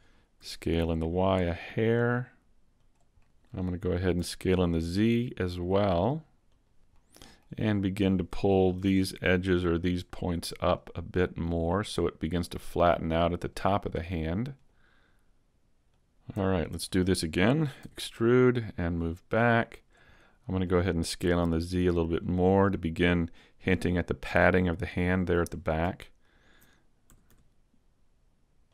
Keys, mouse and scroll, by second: 0.4 s, 2.9 click, 3.2 middle click, 3.6 middle click, 4.2 s, 6.4 scroll up 4, 6.6 click, 6.9 middle click, 8.8 ctrl+Tab, 9.2 middle click, 10.7 right click, 11.1 middle click, 11.4 scroll up 1, 12.4 click, 14.9 right click, 15.9 click, 16.4 alt+right click, 16.4 a, 16.9 middle click, 17.8 e, 18.2 click, 19.0 click, 20.1 middle click, 21.0 s, 22.3 click, 23.6 click, 26.2 middle click, 26.2 alt+right click, 27.0 s, 28.4 middle click.